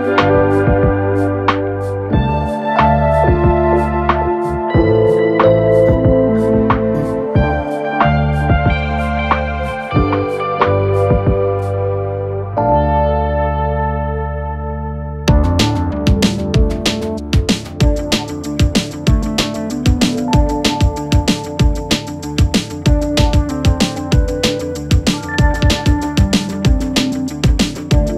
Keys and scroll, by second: 0.6 4, 5.0 2, 5.3 ], 7.3 4, 9.8 3, 10.2 ], 11.3 ], 12.7 ], 15.8 4, 21.1 Return, 22.0 1, 22.1 Return.